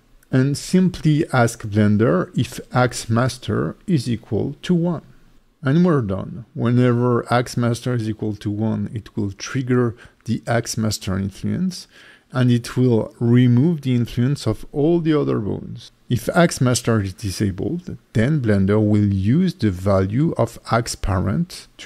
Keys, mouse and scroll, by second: 11.1 click, 11.8-13.1 scroll down 3, 13.1 click, 13.9 click, 14.1 click, 16.0 click, 16.4-17.5 scroll down 5, 17.5 click, 17.6 click, 17.7 click, 17.7-18.1 scroll down 3, 18.9 click, 19.6 click, 20.0 click, 20.4 click.